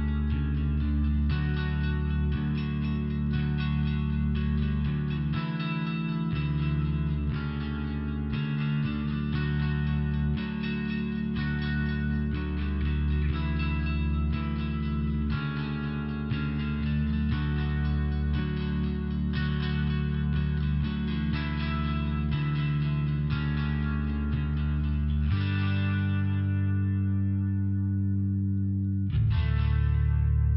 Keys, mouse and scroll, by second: 3.6 ,, 3.8 click, 3.9 click, 4.0 click, 4.1 click, 5.4 click, 5.5 click, 7.9 ], 9.5 click, 10.3 click, 11.5 click, 13.3 click, 15.0 click, 17.5 click, 19.0 click, 21.3 click, 22.6 click, 23.0 click, 24.0 click, 24.6 click, 26.1 click, 27.2 click, 28.0 click, 29.9 click, 30.1 click.